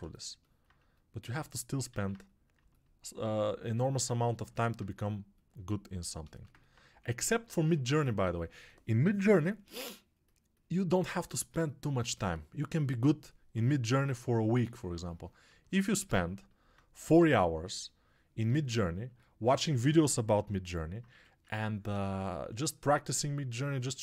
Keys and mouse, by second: 1.8 alt+q, 6.4 ctrl+alt+right click, 6.7 click, 6.8 2, 7.4-15.9 alt+shift+right drag, 15.9-24.0 alt+shift+drag, 16.8 2, 21.0 1.